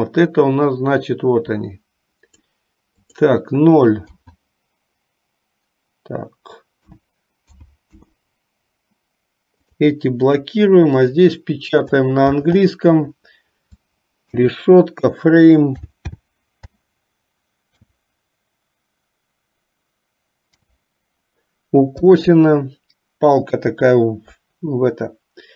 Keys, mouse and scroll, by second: 3.3-8.1 drag, 11.3-25.5 drag.